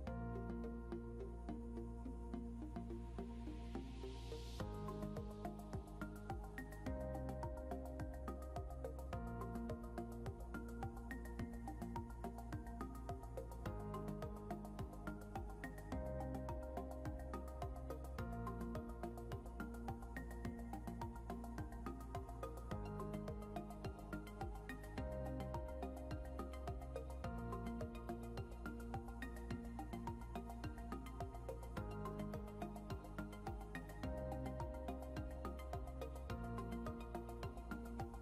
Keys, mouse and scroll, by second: 1.4 scroll up 1, 1.9 scroll up 1, 2.8 scroll down 1, 3.4 scroll up 1, 19.3 scroll up 1, 20.4-21.2 scroll up 1, 23.3 scroll down 1, 27.6 scroll up 1, 30.7 scroll down 1, 34.6 scroll up 1.